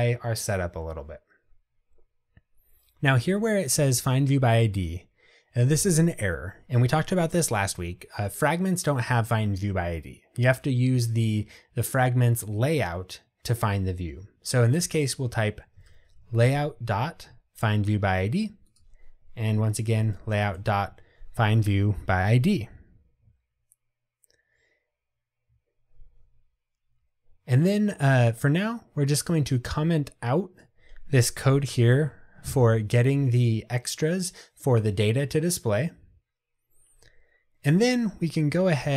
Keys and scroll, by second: 16.9 Escape, 32.0 super+/.